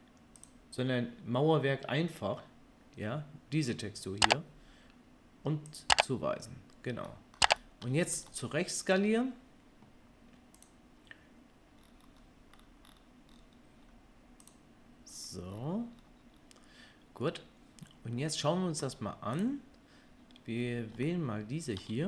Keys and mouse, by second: 0.4 click, 0.4-5.6 middle drag, 5.6-10.7 drag, 10.7-19.3 middle drag, 19.3 click, 19.4-21.8 middle drag.